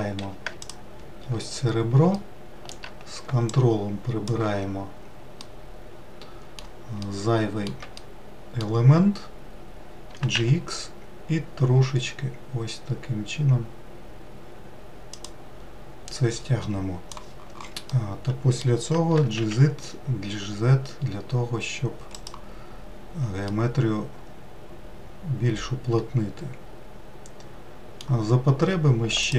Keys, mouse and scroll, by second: 0.5 2, 0.9 alt+click, 2.5 alt+middle click, 3.8 ctrl+click, 5.7-10.4 middle drag, 10.4 g, 18.6-19.8 middle drag, 19.8 g, 24.2-27.2 middle drag.